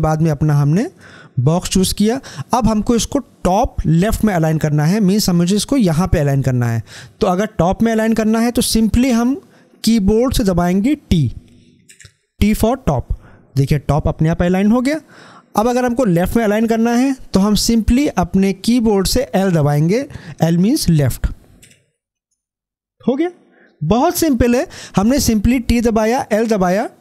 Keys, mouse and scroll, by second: 11.7 shift+click, 21.4 t.